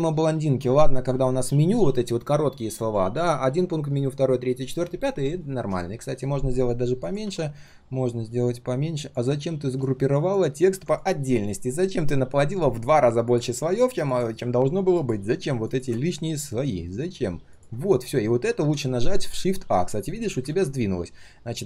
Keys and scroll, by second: 7.2 ctrl+a, 16.6 ctrl+shift+g, 20.4 ctrl+z.